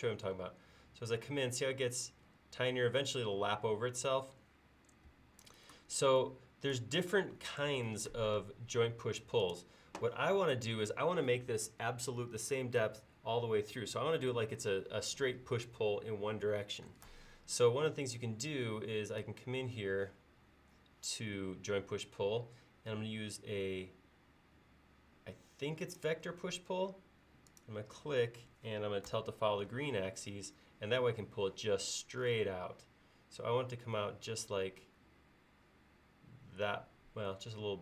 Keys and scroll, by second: 5.2 Escape, 7.8 Escape, 8.5 space, 29.2 BackSpace.